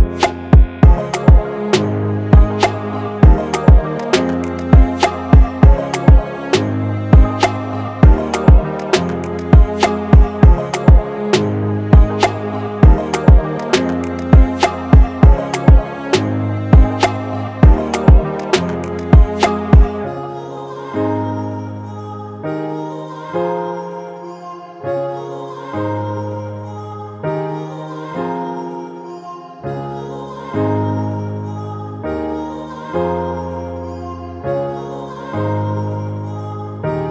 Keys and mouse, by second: 0.0 shift+click, 2.4 click, 8.9 click, 12.7-16.0 drag, 18.0-19.7 drag, 22.1 click, 26.5-28.0 drag, 28.0-28.7 typing, 28.7 Return, 30.7 click, 34.1 click, 35.7 click, 36.4 1.